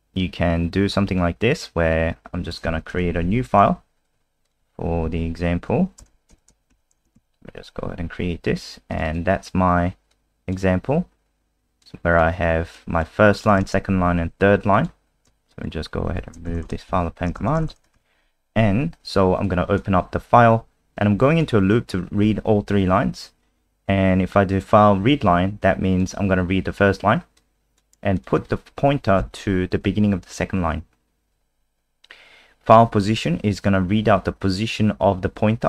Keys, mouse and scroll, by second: 2.4 click, 3.2 End, 3.3 Home, 3.8 Delete, 4.4 click, 5.1 Up, 6.0 Return, 6.3 /, 6.7 *, 7.1 ctrl+s, 7.5 F5, 8.9 click, 9.0 click, 10.1 click, 15.5 shift+click, 16.2 shift+Home, 19.5 click, 29.2 Right.